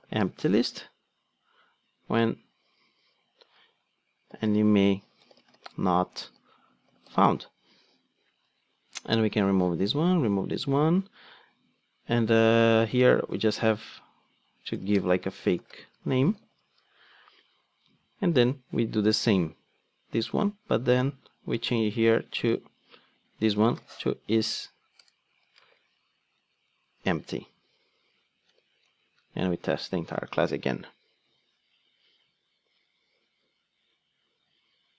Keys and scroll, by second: 9.2 super+x, 22.0 super+x, 24.1 Return, 25.5 Return, 26.9 Return, 29.9 ctrl+d.